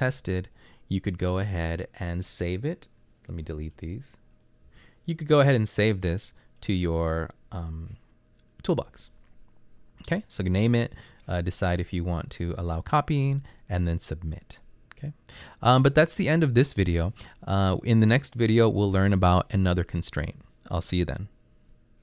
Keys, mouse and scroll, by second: 3.5 Delete, 4.7 Delete.